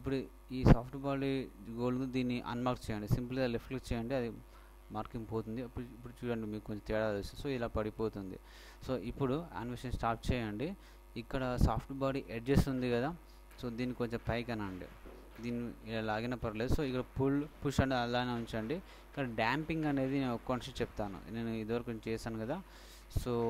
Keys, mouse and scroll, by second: 3.7-5.5 drag, 8.4 Escape, 8.8 Escape, 8.9 Escape, 12.1-14.0 drag, 13.6-15.9 middle drag.